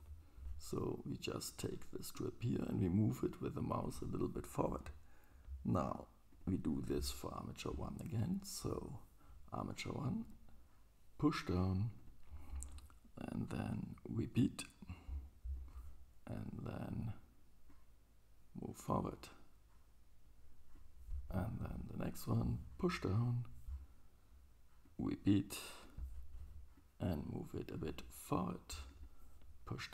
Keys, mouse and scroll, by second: 1.7 click, 5.9 click, 5.9 right click, 6.0 middle click, 6.5-12.0 right drag, 10.3-12.0 drag, 12.1-14.3 right drag, 14.6-16.9 drag, 14.6-26.4 right drag, 17.7-23.3 drag, 25.0-26.4 drag.